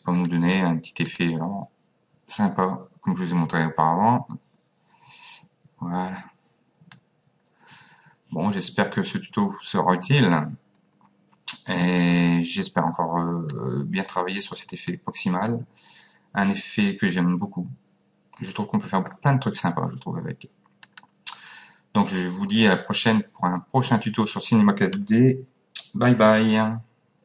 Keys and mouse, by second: 0.2 click, 7.0 click, 14.9 click, 20.9 click.